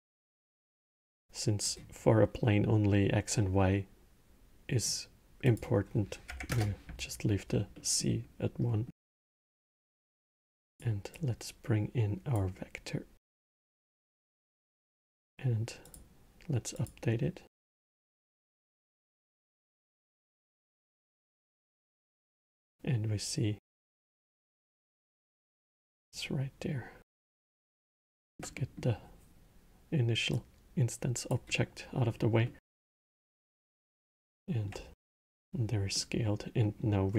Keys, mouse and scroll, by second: 0.4 drag, 5.2-7.5 drag, 7.5-8.8 middle drag, 8.8 scroll, 9.8 drag, 10.9 drag, 13.2-13.8 middle drag, 13.8 scroll, 15.6 click, 16.5 click, 18.3 scroll, 19.3-21.6 alt+middle drag, 21.6 scroll, 22.1-24.7 alt+middle drag, 24.7 scroll, 25.3-26.8 middle drag, 26.8-27.8 drag, 27.8-30.0 alt+middle drag, 30.0 click, 32.2-32.7 middle drag, 32.7 scroll, 33.4-34.7 middle drag, 34.7 scroll, 35.7-36.9 middle drag, 36.9 scroll.